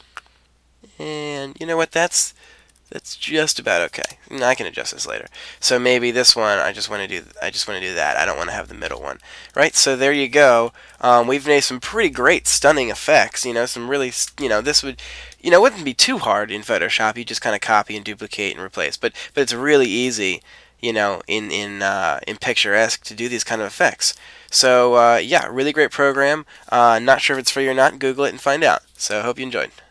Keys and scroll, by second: 2.4 Up, 4.0 Return, 6.5 Right, 7.3 Left, 10.7 shift+Right, 13.5 shift+Left.